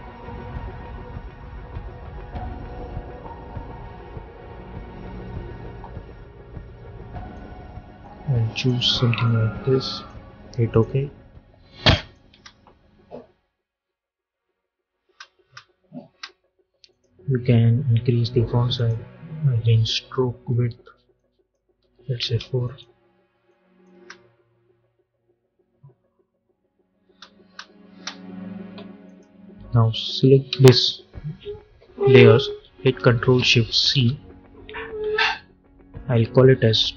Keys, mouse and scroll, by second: 7.2-12.2 drag, 12.2 space, 14.9 space, 16.8 click, 22.1 Return, 22.5 click, 23.8 space, 26.9 space, 28.9 click, 30.4 ctrl+a, 33.7 ctrl+shift+c, 36.6-36.9 typing.